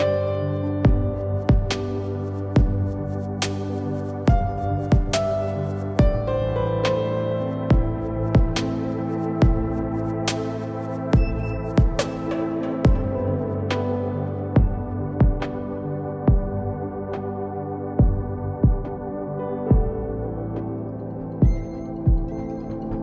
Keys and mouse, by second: 0.2-1.2 drag, 6.0-7.2 drag, 7.9 KP_1, 12.5 KP_1, 14.3 shift+a, 16.5 s, 18.1 s, 22.3 Tab.